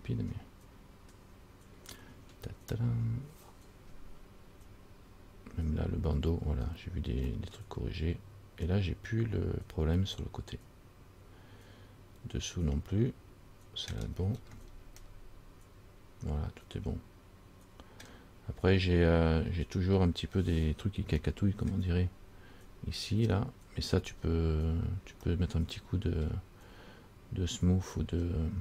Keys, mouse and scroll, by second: 7.5 middle click, 14.3-15.2 scroll up 5, 15.2 middle click, 18.9-19.4 scroll up 4, 20.3-21.3 scroll down 1, 21.4 shift+middle click, 22.2-22.6 scroll up 3, 24.1-24.5 scroll down 4, 24.8 scroll down 3, 25.5 middle click, 27.7-28.6 scroll up 7.